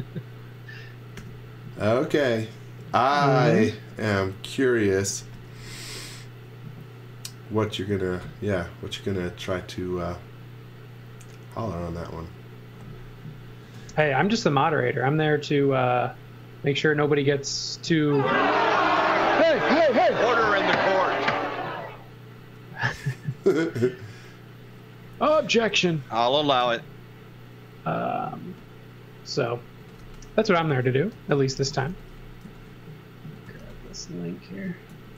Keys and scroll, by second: 1.2 m, 5.3 x, 5.6 v, 11.7 space, 12.8 space, 13.6 x, 13.9 v, 18.9 x, 19.2 z, 19.7 space, 20.7 space, 25.8 l, 26.8 l, 29.6-34.9 typing.